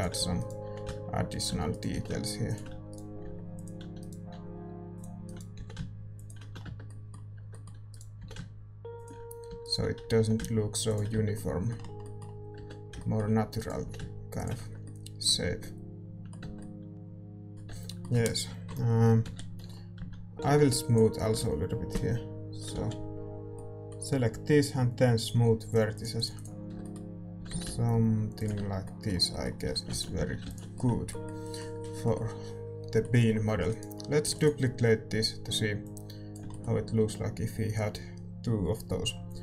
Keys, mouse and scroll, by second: 0.0-6.4 typing, 0.7-8.2 right drag, 6.6 Tab, 6.6 middle click, 6.8-8.2 drag, 8.2 Tab, 8.2 g, 9.4-12.9 right drag, 9.4 a, 10.2 g, 11.1 Tab, 12.9 Tab, 13.5-15.7 right drag, 13.8 g, 14.5 Tab, 16.9 ctrl+s, 16.9 click, 17.7 Tab, 18.6 KP_1, 19.2 z, 19.9 a, 20.9 b, 21.9 ctrl+KP_Add, 22.7 z, 25.2-26.6 drag, 26.6 Tab, 26.6 s, 27.3 s, 28.5 Tab, 29.6 a, 30.1 ctrl+s, 30.1 a, 30.7 ctrl+s, 33.6-35.8 right drag, 34.3 shift+d, 35.2-39.4 drag, 36.4-39.4 middle drag.